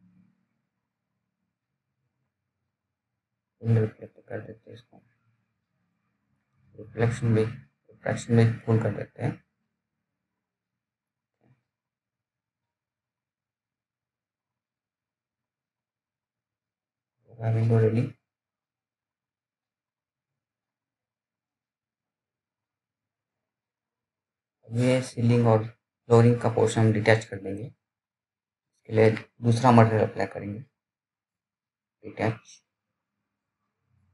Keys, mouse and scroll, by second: 12.6 right click, 13.3 click, 13.3 click, 16.0-16.4 scroll down 1, 16.4 click, 18.1 alt+middle click, 18.9 scroll up 1, 19.2 middle click, 19.8 click.